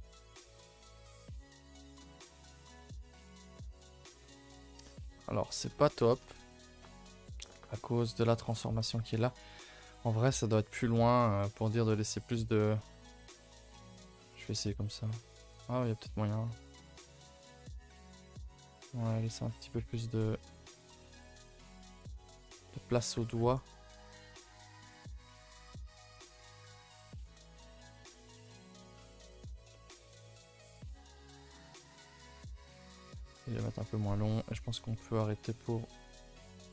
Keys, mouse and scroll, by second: 0.9-2.0 middle drag, 2.0 click, 2.3 Tab, 2.5 scroll down 5, 2.7 a, 2.8 a, 2.9-3.4 middle drag, 3.4 scroll down 1, 3.5-5.2 middle drag, 5.2 click, 5.5 scroll up 1, 5.6 Tab, 5.8 middle click, 6.0 scroll up 1, 6.2 a, 6.3 a, 6.8 scroll up 1, 7.1 scroll down 1, 7.4-11.5 middle drag, 11.5 scroll up 1, 11.7-12.8 middle drag, 13.0 click, 13.5 shift+click, 13.7 shift+click, 14.0 shift+click, 14.4 g, 16.2-17.0 middle drag, 17.0 click, 17.3 Tab, 17.7 scroll down 2, 17.9 middle drag, 18.1 scroll up 2, 18.4 middle drag, 18.6 Tab, 18.8 middle drag, 19.0-19.9 scroll up 1, 19.9 click, 20.9 1, 21.2 click, 21.9 shift+click, 22.3 shift+click, 22.6 middle click, 23.0 g, 23.7 middle click, 24.2 g, 25.0 middle click, 25.8 click, 26.1 middle click, 26.5 g, 28.1-30.1 middle drag, 30.1 click, 30.4 g, 31.3-32.7 middle drag, 32.7 4, 32.8 click, 33.4 3, 33.6 click, 33.9 shift+click, 34.3 shift+click, 34.5 shift+click, 34.8 middle click, 35.2 g, 36.0 r, 36.5 g.